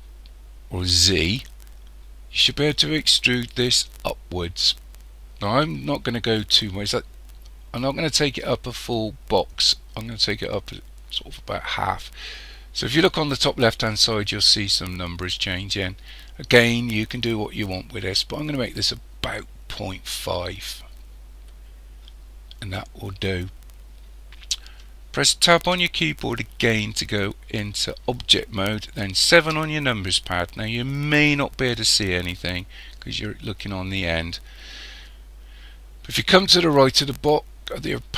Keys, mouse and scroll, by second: 25.6 Tab, 29.4 KP_7.